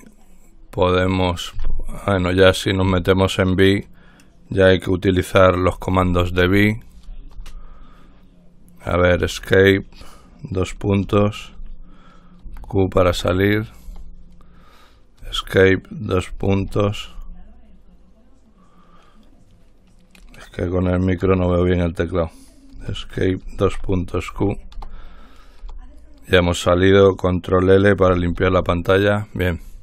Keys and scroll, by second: 3.1 Escape, 5.5 Escape, 6.3-8.1 typing, 9.3 Escape, 11.3 typing, 12.6 typing, 13.3 Return, 14.1 Return, 15.4 Escape, 16.8 space, 23.0 Escape, 23.9-24.5 typing, 24.9 Return, 25.8 Return, 28.5 ctrl+l.